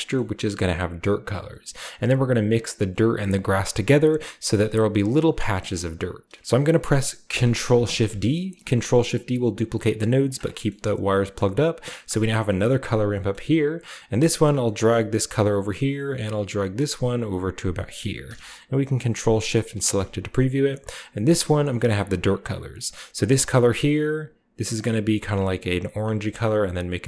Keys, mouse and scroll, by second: 0.0 scroll up 1, 0.6-1.1 scroll down 1, 5.7-6.3 middle drag, 5.9 click, 6.9-8.0 drag, 7.7 ctrl+shift+d, 10.2 click, 12.2 scroll up 2, 13.3-13.7 scroll up 2, 14.3 middle click, 14.3-14.9 scroll up 1, 14.6-15.2 drag, 16.6-17.9 drag, 19.6 ctrl+shift+click, 22.7 click, 23.3 click, 24.5 click, 25.6 click, 26.2-27.0 scroll down 2.